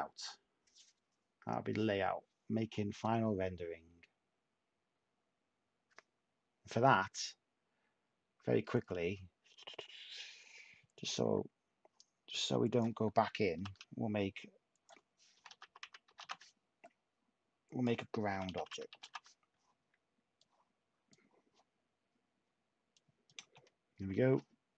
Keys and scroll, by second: 11.2 n, 13.5 0, 13.6 Tab, 15.1-16.6 typing, 18.3-19.6 typing, 22.8-23.5 typing, 23.9 Tab.